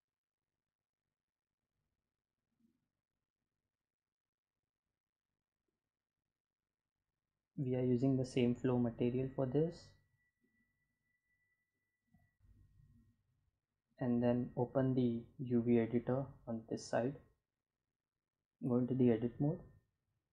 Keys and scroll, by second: 17.0 Tab, 18.9 a, 20.0 u.